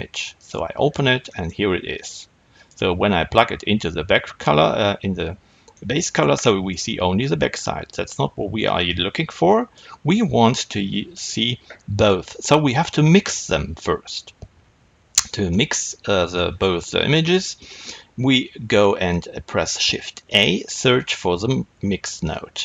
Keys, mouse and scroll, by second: 0.5 click, 1.9-5.6 drag, 5.6-8.8 middle drag, 8.8-22.6 drag.